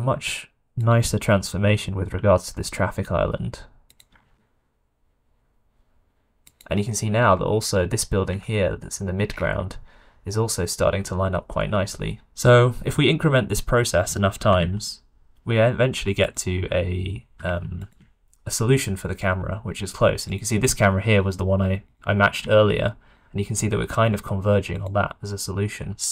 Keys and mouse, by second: 1.4 r, 4.1 s, 8.4 shift+middle click, 9.3 middle click, 14.3 r, 17.4 q, 21.1 click, 21.8 click, 22.6-23.1 shift+middle drag, 24.7 click.